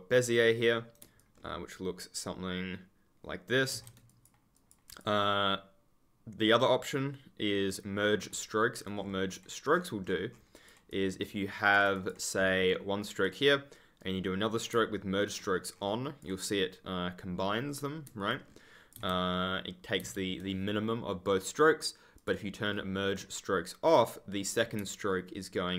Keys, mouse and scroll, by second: 0.2 right click, 1.1 ctrl+click, 1.3-2.1 ctrl+scroll down 1, 3.7 ctrl+z, 8.8 ctrl+click, 8.9-9.6 ctrl+scroll up 1, 9.6 ctrl+click, 9.7-10.8 ctrl+scroll up 1, 10.8 ctrl+click, 11.0-11.3 ctrl+scroll up 1, 12.6 right click, 15.2 ctrl+click, 15.3-16.5 scroll up 1, 16.8 ctrl+click, 18.2 ctrl+click, 18.3-18.8 ctrl+scroll down 1, 18.9 ctrl+z, 22.1 click, 22.7 right click, 25.7 ctrl+click.